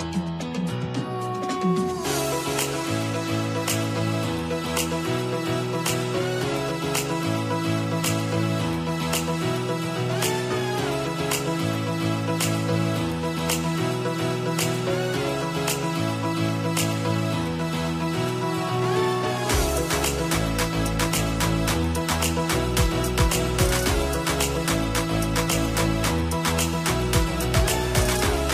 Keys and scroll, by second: 7.7 ctrl+t.